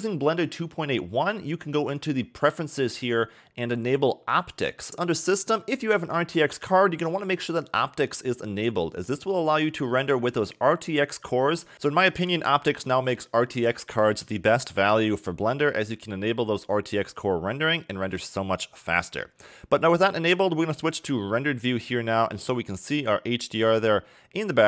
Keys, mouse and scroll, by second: 1.9 click, 17.5 shift+middle click, 20.8 click.